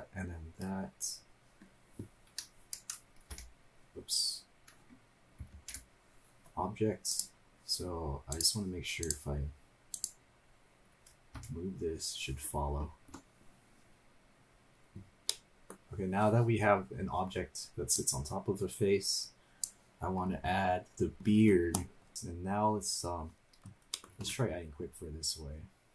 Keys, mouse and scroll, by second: 0.1-2.3 scroll down 3, 3.3 p, 5.5 ctrl+p, 8.3 drag, 9.0 click, 9.9 click, 11.4 g, 15.3 middle click, 18.0-19.6 drag, 20.3-20.9 scroll up 4, 20.9 scroll down 2, 23.9 middle click, 24.1 shift+a.